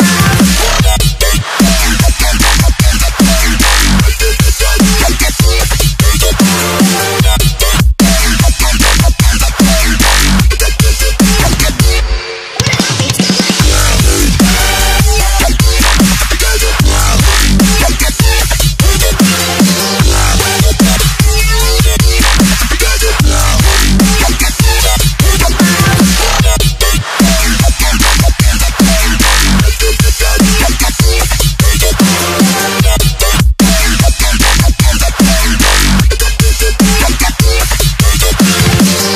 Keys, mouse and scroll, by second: 4.8-6.0 scroll down 1, 6.1 alt+Tab, 6.5 alt+click, 8.4 ctrl+c, 8.6 alt+Tab, 9.4 click, 11.1 ctrl+v, 11.9 click, 15.1 click, 19.1-19.4 scroll down 1, 19.4 click, 20.0 Left, 21.9 click, 23.3 ctrl+t, 23.7 shift+click, 25.2 Return, 25.7 ctrl+0, 26.2 click, 27.1-28.2 scroll up 1, 28.2 click, 28.4 right click, 28.9 click, 29.8 ctrl+s, 31.1 click, 34.2 click, 36.2 s, 37.4 click.